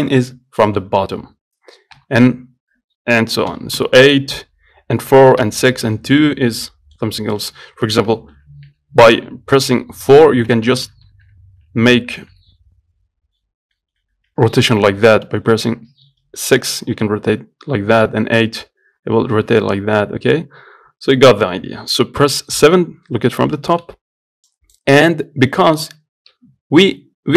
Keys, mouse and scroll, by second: 2.2 KP_5, 5.4 KP_4, 5.7 KP_6, 6.9 middle click, 7.3 scroll up 3, 7.6 middle click, 8.0 scroll down 1, 8.6 KP_4, 8.9 KP_4, 10.5-13.8 typing, 16.0 KP_6, 16.1-16.8 KP_6, 17.0 KP_6, 18.3-20.5 KP_8, 22.9 KP_7, 23.6-24.0 scroll up 1, 24.0 z, 24.7 click, 25.2 scroll down 1, 25.6 scroll up 2, 26.7 Tab.